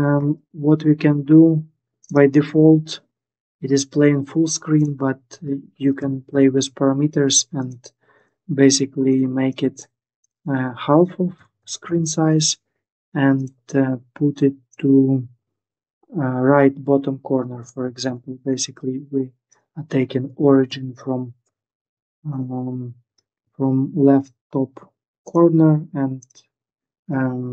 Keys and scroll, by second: 5.5-6.5 typing, 11.0-11.3 typing, 11.6 Return, 17.2-18.1 typing, 20.0-20.4 typing, 21.2 Return.